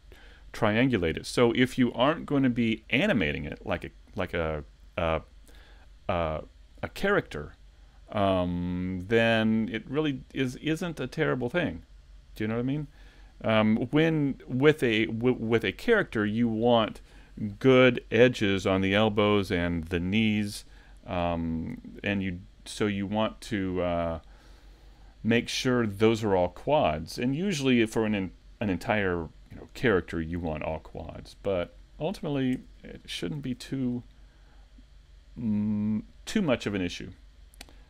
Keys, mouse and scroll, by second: 31.8 shift+middle click, 31.8-32.2 scroll down 2, 32.6 Tab, 33.0 middle click.